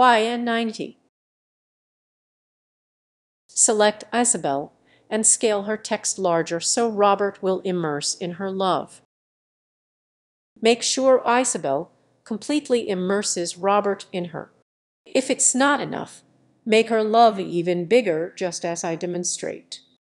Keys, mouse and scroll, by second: 2.5 click, 4.6 click, 5.2-8.6 drag, 10.6 click, 12.3-14.6 drag, 16.3-17.9 drag.